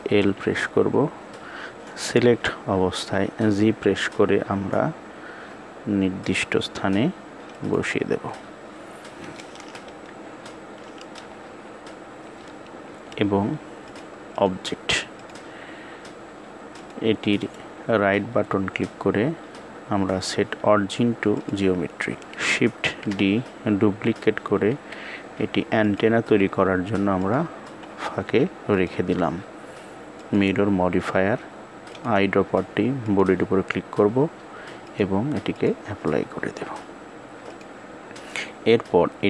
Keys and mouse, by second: 9.9 KP_7, 13.7 click, 15.0 click, 17.3-21.3 right drag, 22.7 shift+d, 28.4-30.0 drag, 31.6 click, 34.5 click, 37.2 click.